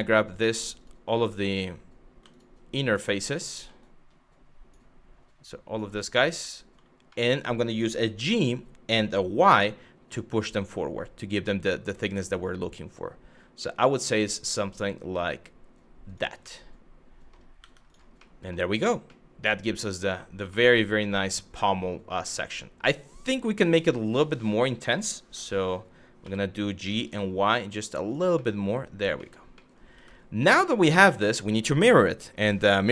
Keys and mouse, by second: 0.2 click, 0.4 click, 2.8 shift+click, 3.4 shift+click, 5.2 shift+click, 6.8 middle click, 7.7 g, 9.0 y, 15.7 click, 16.2 middle click, 17.2 Tab, 17.5 click, 17.9-18.3 middle drag, 18.8-19.7 middle drag, 20.2 shift+middle drag, 20.7-23.1 middle drag, 23.8 ctrl+z, 25.0 Tab, 25.9 g, 26.7 y, 27.7 click, 28.1 middle click, 28.9 middle click, 29.3 middle click, 29.6 Tab, 30.1 middle drag, 30.8 middle click.